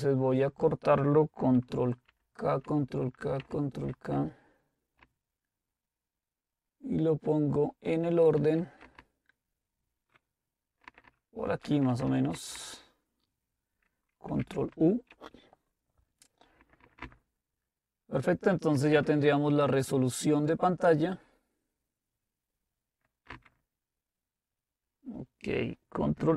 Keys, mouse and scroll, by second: 2.1 ctrl+k, 2.6 ctrl+k, 3.4 ctrl+k, 5.0 Up, 5.6 Up, 5.7 Up, 5.8-7.7 Up, 7.9 Up, 8.4 Up, 9.0 Down, 9.6 Down, 9.7 Down, 10.3 Down, 10.8 Down, 11.3 Down, 11.6 Return, 11.8 Return, 12.0 Return, 12.3 Up, 12.5 Up, 14.4 ctrl+u, 16.6 Up, 16.8 Up, 17.0 Up, 18.9 Down, 19.1 Down, 23.9 Down.